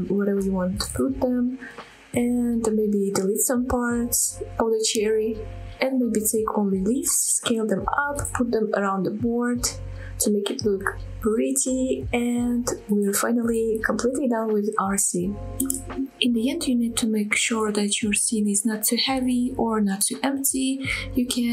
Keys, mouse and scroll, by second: 0.0-1.6 typing, 0.0 middle click, 0.1 scroll up 2, 0.2 middle click, 0.4 click, 0.5 middle drag, 0.6 scroll down 1, 0.8 scroll up 1, 1.1 shift+click, 1.2 middle click, 1.3 scroll down 1, 1.3 middle click, 1.4 scroll up 1, 1.6 click, 1.6 middle drag, 1.8 scroll down 2, 1.9 middle click, 2.0 click, 2.0 scroll up 1, 2.1 shift+middle click, 2.2 click, 2.2 middle click, 2.6 shift+click, 2.6 shift+middle click, 2.8 shift+click, 2.8 middle click, 3.0-14.4 typing, 3.3 click, 3.3 middle click, 3.5 middle click, 3.8 shift+middle click, 4.9 click, 5.1 middle click, 5.1 scroll up 2, 5.3 click, 5.5 click, 5.8 click, 5.9 middle click, 6.0 shift+middle click, 6.4 click, 6.5 middle click, 6.7 middle click, 7.0 click, 7.0 middle click, 7.5 middle click, 7.9 click, 8.4 middle click, 8.7 click, 8.7 middle click, 9.2 middle click, 9.2 scroll down 1, 9.4 drag, 9.4 middle drag, 9.5 scroll up 1, 9.9 click, 10.1 click, 10.3 shift+middle click, 10.4 scroll up 1, 10.7 shift+click, 10.8 middle click, 10.9 scroll down 2, 11.0 middle click, 11.3 shift+middle click, 11.5 click, 12.1 click, 12.2 middle click, 12.3 scroll up 2, 12.4 middle click, 12.8 shift+click, 12.9 middle click, 12.9 scroll down 3, 13.1 shift+middle drag, 13.4 shift+middle click, 14.0 click, 14.2 click, 14.4 click, 14.4 middle click, 14.6-15.1 scroll down 2, 14.6 shift+middle click, 14.7 click, 14.8 middle click, 15.5 middle click, 16.7 ctrl+s, 17.1 scroll up 2, 17.6-18.0 shift+middle drag, 19.6-21.5 middle drag.